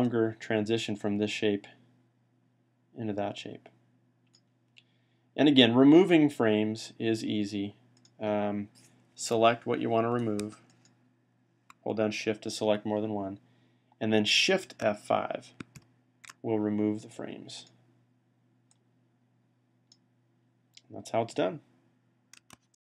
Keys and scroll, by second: 15.6 F5.